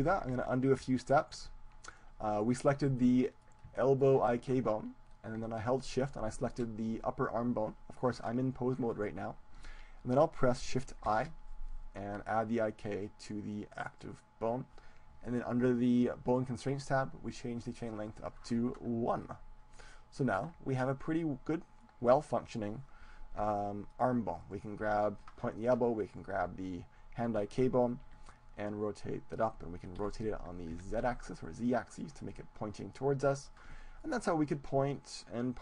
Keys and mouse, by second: 0.1 ctrl+z, 0.8 ctrl+z, 1.8-4.2 right drag, 3.0 click, 4.2-5.6 middle drag, 6.2-8.4 right drag, 11.0 shift+i, 16.4-20.0 drag, 19.2 right click, 20.0-21.0 middle drag, 21.0-22.8 right drag, 21.8 click, 22.1 middle click, 22.8 middle click, 23.4 g, 24.3-29.2 drag, 24.6-26.1 right drag, 25.0 g, 26.7-27.8 right drag, 26.7 g, 28.4 r, 29.7-31.2 drag, 30.0 r, 32.2-33.8 drag, 33.8-35.6 middle drag.